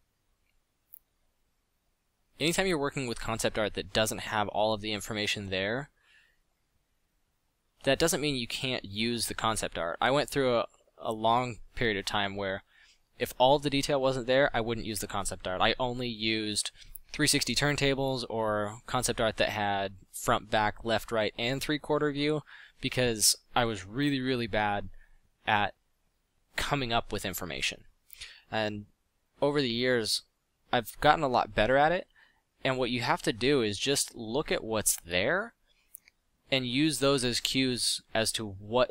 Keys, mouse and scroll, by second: 2.9 f, 3.8 f, 6.8 f, 27.1 f, 37.0 middle drag.